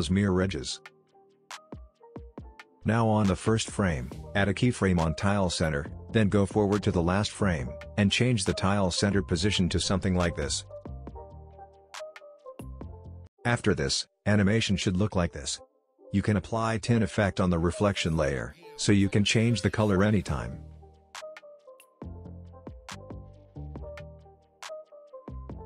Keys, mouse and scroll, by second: 0.6 click, 2.6-3.4 drag, 14.7 space, 15.9 click, 15.9 click, 17.1 ctrl+space, 17.3-18.5 typing, 19.0-25.6 drag, 20.9-22.0 drag.